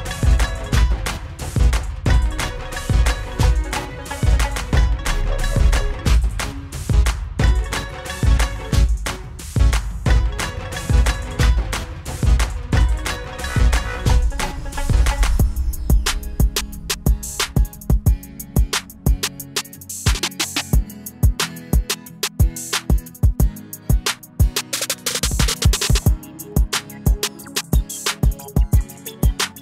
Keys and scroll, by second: 1.4 ctrl+z, 4.9 ctrl+-, 6.2 ctrl+=, 9.9 ctrl+=, 28.3 ctrl+z.